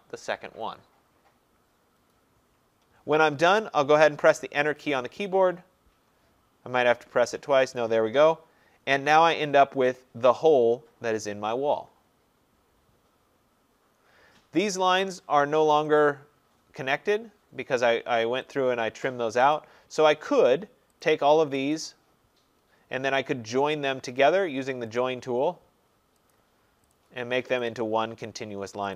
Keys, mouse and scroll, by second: 4.2 click, 4.7 Return, 16.0 click, 18.6 click, 19.6 click, 21.1 click, 21.8 click, 25.0 click, 26.4 click, 27.0 click, 27.8 click.